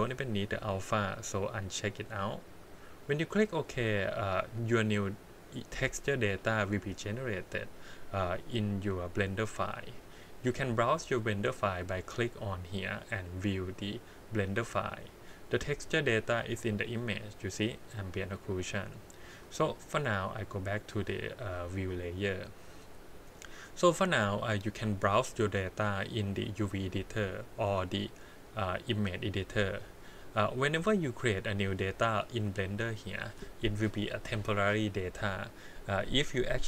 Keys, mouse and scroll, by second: 12.3-14.4 drag, 16.4 click, 17.7 click, 19.2 click, 19.8-22.1 drag, 25.1-26.4 drag, 27.4-29.6 drag, 30.4-31.2 scroll down 3, 31.2 middle click, 31.8-32.3 scroll up 1.